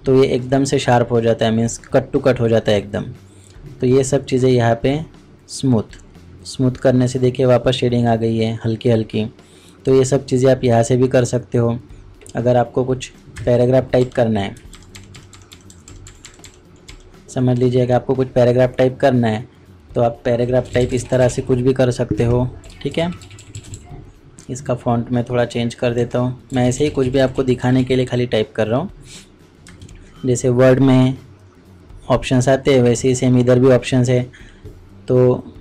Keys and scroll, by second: 14.5 ctrl+KP_Subtract.